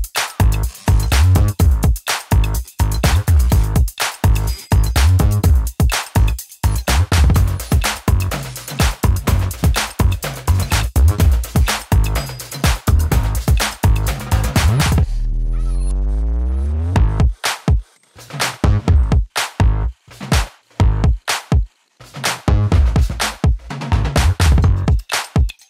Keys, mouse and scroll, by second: 6.2 alt+[, 9.6 click, 13.2-14.5 shift+drag, 15.2-16.4 drag, 20.1 click, 20.5-21.5 typing, 22.7-25.2 shift+drag.